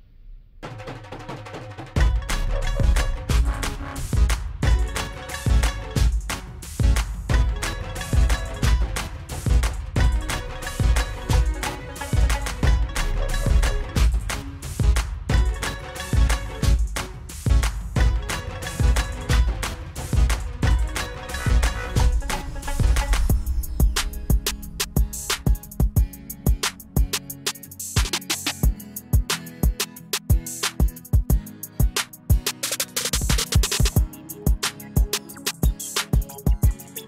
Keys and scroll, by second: 11.9-13.2 typing.